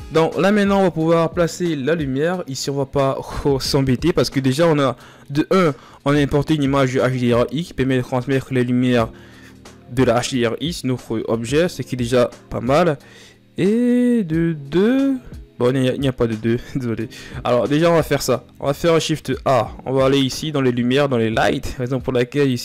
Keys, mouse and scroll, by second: 1.1-3.9 scroll down 1, 3.9 scroll down 1, 4.6-5.2 middle drag, 5.2-6.5 scroll down 4, 6.5-16.9 scroll down 1, 16.9 scroll down 1, 17.2-18.1 middle drag, 18.1 KP_1.